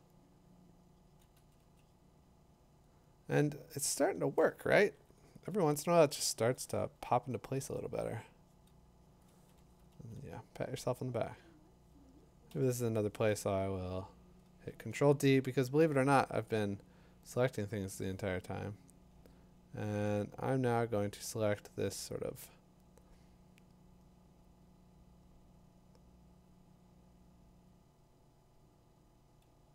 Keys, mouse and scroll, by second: 1.3 ], 1.6 ], 5.5 click, 7.3 click, 9.5 [, 9.6 [, 11.1 [, 12.5 |, 14.9 ctrl+d.